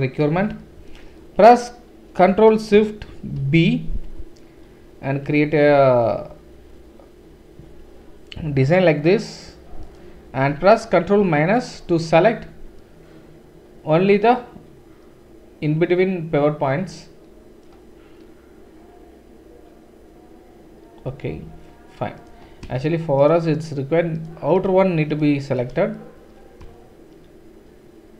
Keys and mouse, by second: 3.4 ctrl+shift+b, 11.2 ctrl+KP_Subtract, 14.3-22.3 right drag, 22.3 shift+click, 22.7 shift+middle click, 22.7-28.1 shift+right drag, 24.6 shift+click, 24.6 shift+middle click.